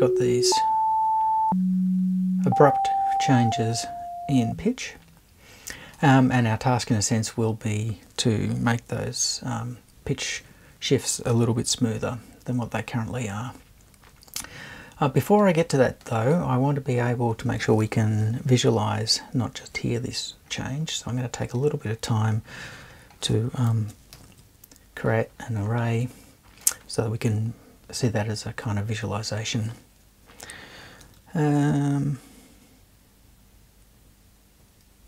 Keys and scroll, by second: 24.1 shift+super+a.